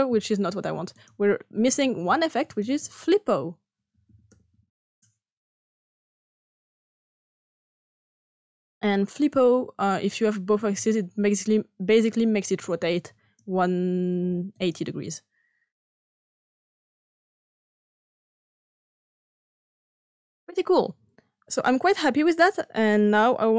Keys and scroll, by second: 3.6-4.9 typing.